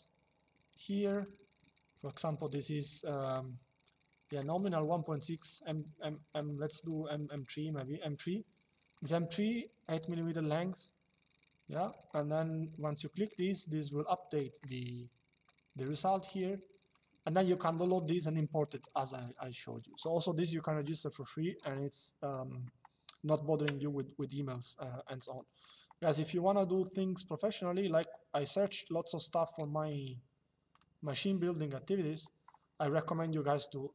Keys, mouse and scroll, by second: 0.9 click, 5.1 click, 7.0 click, 8.7 click, 15.1 click, 24.9 click, 29.5 click.